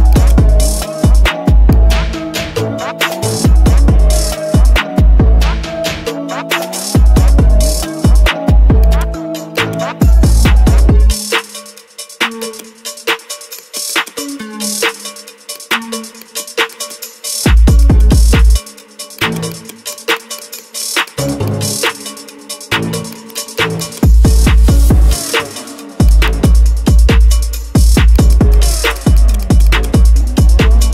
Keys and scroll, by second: 11.3 ctrl+z, 14.6 ctrl+z, 17.3 ctrl+z.